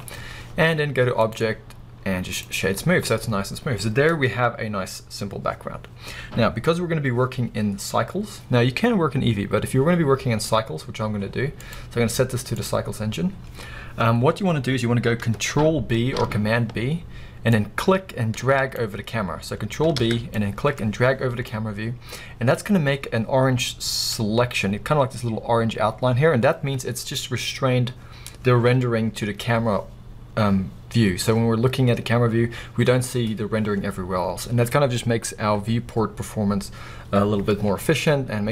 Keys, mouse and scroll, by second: 1.2-9.7 drag, 5.6-6.0 scroll down 1, 11.6 click, 16.1 ctrl+b, 17.8-23.3 drag, 21.8 scroll up 1, 24.5 drag, 24.6 scroll down 2, 24.9-25.5 drag, 24.9-25.5 scroll up 2, 25.8 drag, 26.0 scroll down 2, 26.2 click.